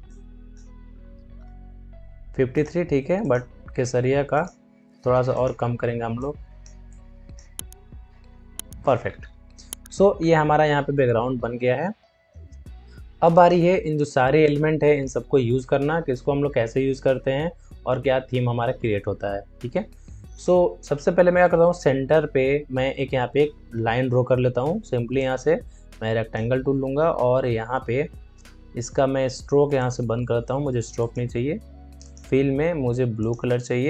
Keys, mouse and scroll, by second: 8.1 Return, 8.9 alt+scroll down 1, 13.3-17.3 drag, 20.2 click, 25.1-28.7 drag, 29.7-33.8 drag.